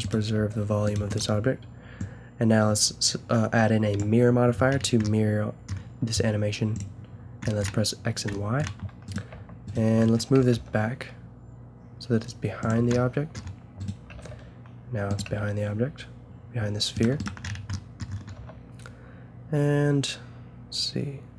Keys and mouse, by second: 0.2 click, 0.3-2.0 right drag, 0.3 g, 3.3-3.7 right drag, 6.7 click, 7.6-9.1 middle drag, 10.3 g, 12.8 a, 13.0-16.3 drag, 14.1 g, 15.2 g, 17.2-20.0 drag, 18.4 s.